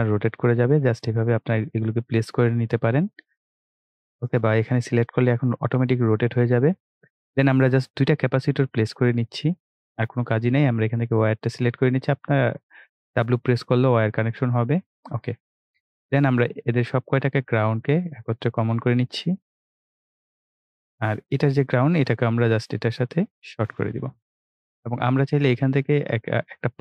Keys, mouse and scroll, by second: 5.5-8.7 drag, 26.1-26.8 drag.